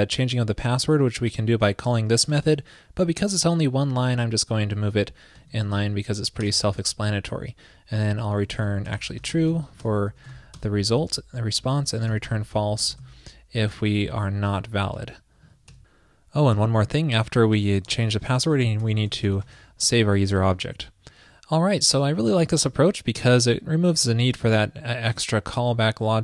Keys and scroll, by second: 5.0 super+x, 5.6 super+v, 9.0 alt+BackSpace.